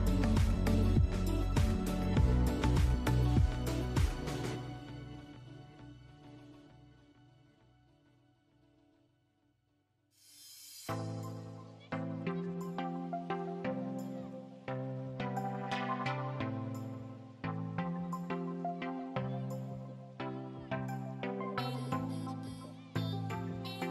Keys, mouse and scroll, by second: 0.1 scroll down 1, 0.3-1.5 middle drag, 1.2-1.5 scroll down 2, 1.5 click, 2.3-4.2 drag, 4.5 scroll down 1, 4.8-8.6 middle drag, 5.1-5.6 scroll up 2, 6.5 Tab, 7.3 ctrl+r, 8.6 click, 8.8-11.2 middle drag, 9.9 ctrl+r, 11.2 click, 11.9 click, 12.2 click, 12.6 click, 12.9-16.1 middle drag, 13.3-14.5 scroll up 2, 14.5 i, 16.5 click, 17.1 Tab, 18.1-20.4 middle drag, 19.5 ctrl+r, 20.6 click, 21.0 click, 21.2 Tab, 21.6 click, 21.8-22.1 scroll down 2, 22.1-23.9 middle drag.